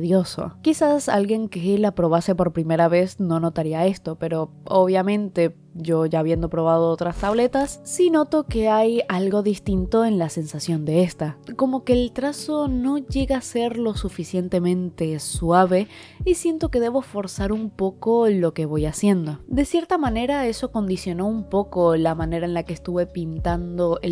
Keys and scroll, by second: 3.3 space, 6.9 i.